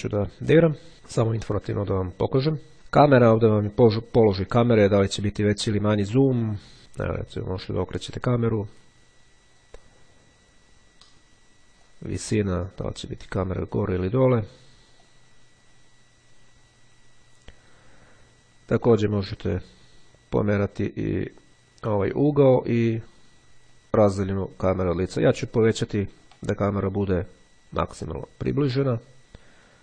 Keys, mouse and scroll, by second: 2.7 click, 6.8-9.7 drag, 12.0-13.5 drag, 14.1-18.3 drag, 22.7-26.9 drag, 27.6-29.5 drag.